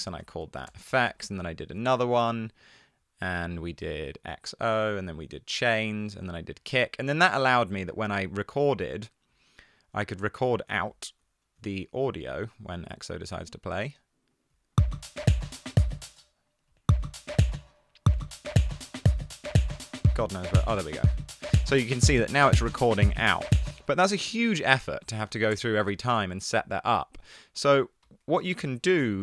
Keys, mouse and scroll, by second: 0.0 super+r, 0.4 typing, 1.2 super+t, 23.8 space, 24.8 super+r, 25.2-25.5 typing, 25.9 super+t, 28.1 shift+Down, 28.3 shift+Down, 28.6 BackSpace.